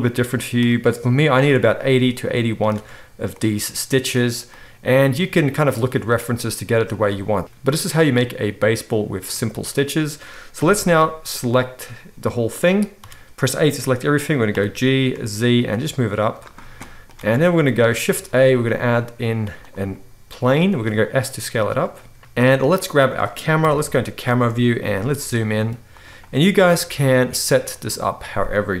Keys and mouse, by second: 2.7 alt+a, 7.0-22.7 middle drag, 10.5 KP_1, 13.0 a, 14.5 g, 17.2 alt+a, 18.1 shift+a, 20.6 s, 22.7 click, 22.8-27.8 middle drag, 23.6 KP_0, 24.8 g, 27.8-28.8 drag.